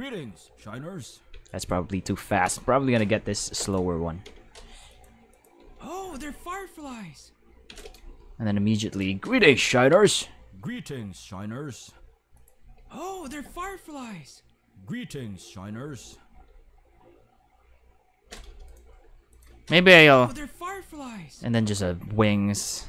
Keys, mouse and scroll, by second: 1.3 space, 1.5 click, 3.1 k, 3.6 right click, 4.2 x, 4.9 click, 5.3 click, 5.6 space, 7.7 space, 7.8 right click, 8.2 g, 8.9 click, 9.4 click, 9.9 space, 11.9 space, 12.4 click, 12.6 space, 16.4 space, 18.7 right click, 18.9 g, 19.3 click, 19.7 click, 20.0 space, 22.1 space.